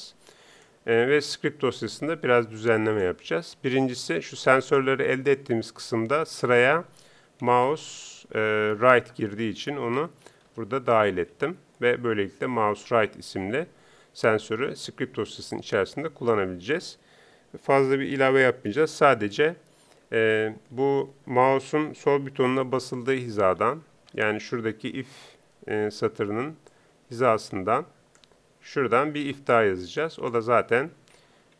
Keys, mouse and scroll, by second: 0.0-31.5 drag.